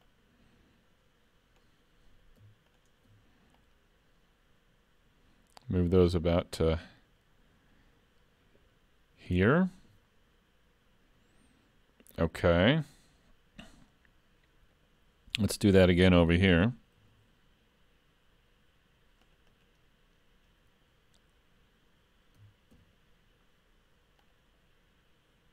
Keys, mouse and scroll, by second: 0.1 click, 2.7 alt+click, 3.6 click, 17.0 ctrl+r, 22.4 s.